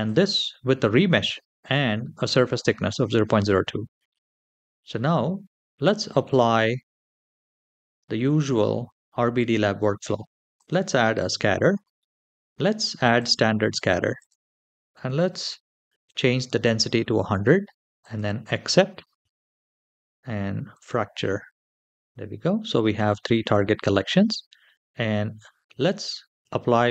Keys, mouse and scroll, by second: 5.6 click, 10.3 click, 12.9 click, 13.9-15.8 drag, 15.5 KP_0, 17.8 click, 18.0 typing, 18.8-20.5 scroll down 2, 20.5-21.8 drag, 21.8 scroll up 2, 23.7-26.3 scroll down 3.